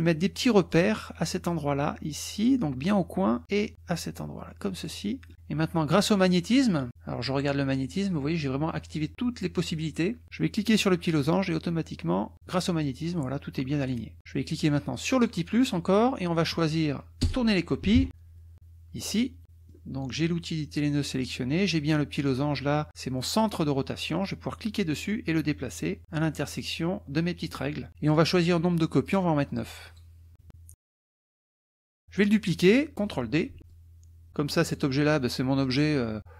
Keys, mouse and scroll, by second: 0.7-2.6 drag, 3.7-5.0 drag, 5.3 middle click, 11.2-13.0 drag, 15.1 click, 15.5 scroll up 1, 16.4-16.9 scroll up 1, 17.2-18.6 typing, 19.0 click, 19.4 click, 24.5-26.8 drag, 29.0 click, 30.4 KP_Subtract, 31.1 click, 31.6 click, 31.8 click, 33.6 ctrl+d, 33.7-34.3 ctrl+drag, 34.8 ctrl+drag.